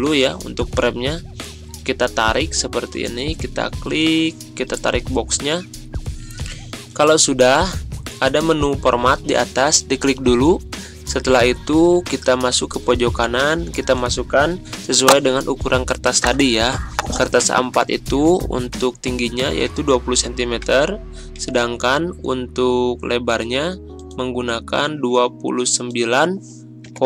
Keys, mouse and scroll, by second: 6.5-7.2 drag, 9.7 click, 12.9-14.1 drag, 19.1-20.1 typing, 20.7 Tab.